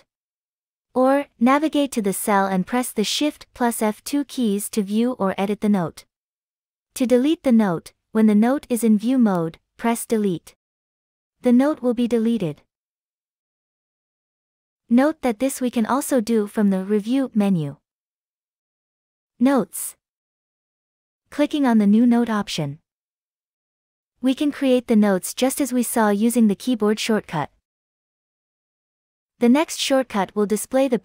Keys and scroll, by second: 5.1 shift+F2, 8.1 Escape, 9.1 Escape, 11.3 Delete.